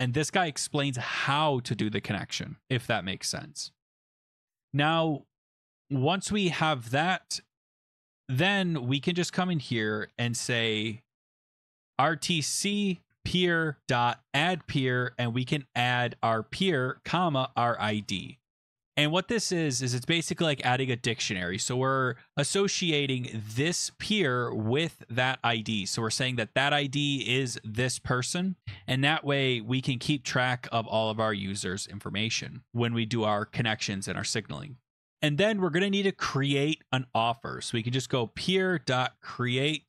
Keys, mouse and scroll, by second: 2.7 click, 3.4-4.6 scroll, 5.3-6.1 scroll, 7.7-8.1 scroll, 9.2 click, 9.7 Return, 11.5-14.8 typing, 13.1 Tab, 16.0-18.1 typing, 22.9 click, 23.1 click, 25.4 click, 25.5 click, 31.4 Right, 32.1 Right, 32.4 Return, 32.7 Return, 37.8-39.8 typing.